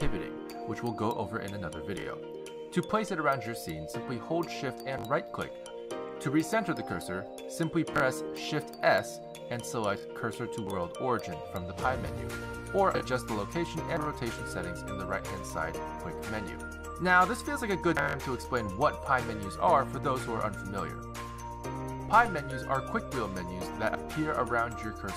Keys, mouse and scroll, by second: 2.8 x, 5.7 shift+right click, 7.2 shift+right click, 9.3 shift+s, 10.0 shift+s, 15.4 click, 16.4 click, 22.2 n.